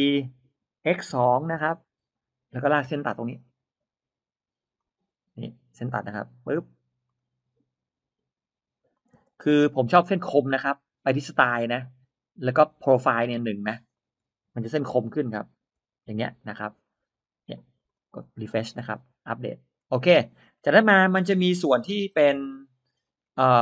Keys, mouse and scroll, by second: 0.1 Return, 1.4 2, 2.8 l, 4.6 click, 5.8 Escape, 6.9 click, 8.6 click, 9.0 space, 9.4 middle click, 13.4 click, 14.8 1, 15.6 Return, 16.8 scroll up 1, 17.6 click, 17.8 click, 18.6-19.3 scroll down 2, 18.9 middle click, 19.8 scroll down 1, 20.1-20.4 scroll up 1, 20.4 middle click, 22.0-22.4 scroll up 2, 22.8-23.4 scroll down 3, 23.5 middle click.